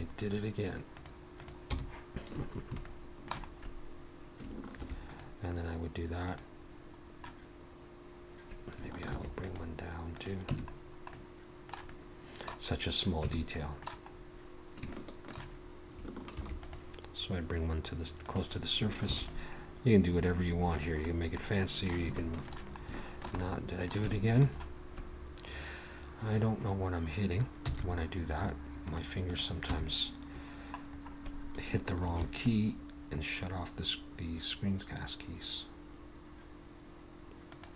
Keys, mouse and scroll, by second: 1.7 n, 2.9 shift+middle click, 3.5-4.4 scroll up 2, 4.7 ctrl+r, 7.0 scroll down 1, 9.1 ctrl+r, 10.5 Tab, 10.8-11.1 scroll down 2, 11.1 middle click, 11.9 middle click, 12.7 scroll up 1, 13.3 Tab, 13.5 middle click, 14.1-14.8 scroll up 1, 14.8 scroll up 1, 14.9 shift+middle click, 16.2 ctrl+r, 19.1 ctrl+r, 21.1-22.1 scroll down 2, 21.4 middle click, 29.7 n, 30.9-31.6 scroll up 1, 32.1 ctrl+r.